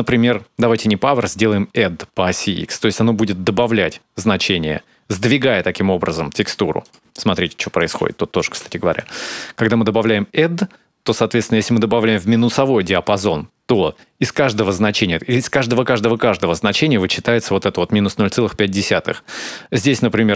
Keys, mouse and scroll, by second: 3.4 click, 6.7 ctrl+shift+click, 7.6 click, 9.8 shift+click.